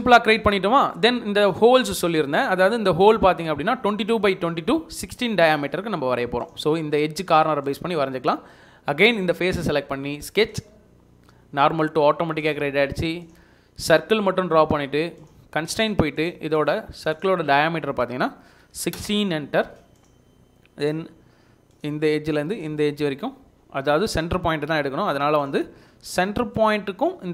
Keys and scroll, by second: 14.3 Escape, 14.8 Escape, 18.2-19.1 typing, 19.7 Escape, 19.8 Escape, 23.4 Escape.